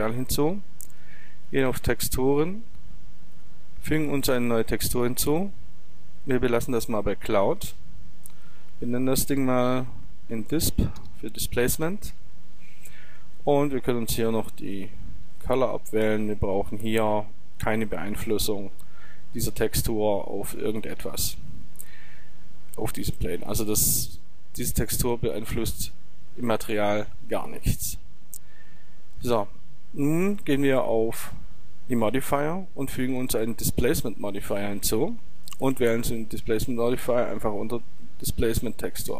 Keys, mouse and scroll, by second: 1.0-2.8 drag, 3.6-11.5 drag, 16.1-18.0 drag, 30.7-34.1 drag, 35.9-38.5 drag.